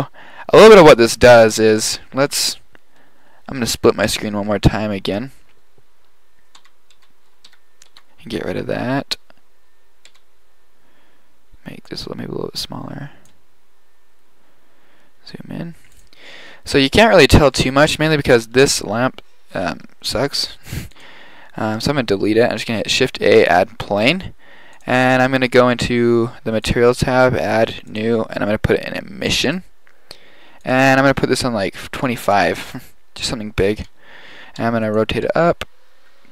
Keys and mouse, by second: 4.1 click, 4.3 click, 6.0 drag, 6.6 n, 7.0 n, 7.5 t, 7.9 t, 10.3 n, 16.9 middle click, 19.5 KP_7, 19.7 KP_5, 20.6 x, 22.7 shift+a, 24.8-29.8 drag, 30.7-32.6 drag, 33.8 KP_1, 34.8 r, 35.4 g.